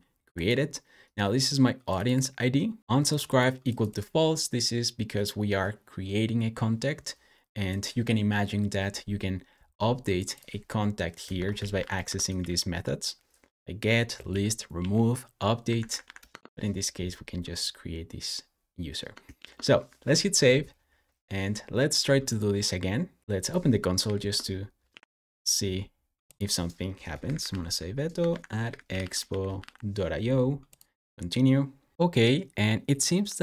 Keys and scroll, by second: 11.2 Escape, 11.2-12.7 typing, 13.6 Down, 14.1 Down, 14.6 Down, 15.5 Up, 15.7 Up, 15.9 Up, 16.1 Return, 19.2 super+s, 23.9 super+j, 26.6-30.0 typing, 31.9 Return.